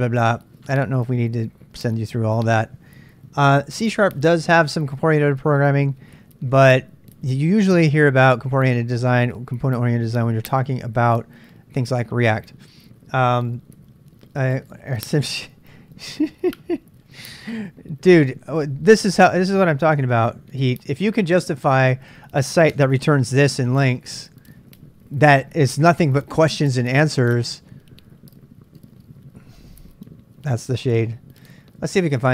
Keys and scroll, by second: 20.0 super+Tab, 22.8 super+Tab, 32.0-32.3 typing.